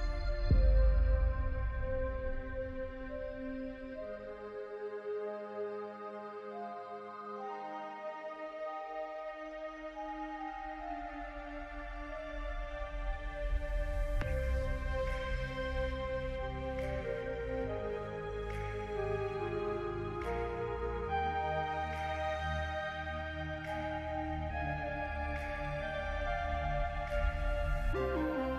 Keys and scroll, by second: 5.5 j, 10.3-12.3 typing, 17.8 j, 24.8 ctrl+c, 25.0 ctrl+v.